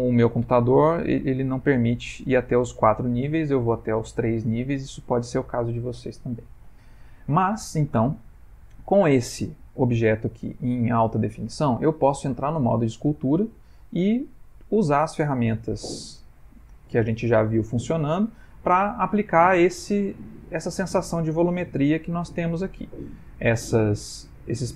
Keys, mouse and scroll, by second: 6.1 middle click, 7.6 middle click, 8.4 ctrl+middle click, 9.5 middle click, 12.5 click.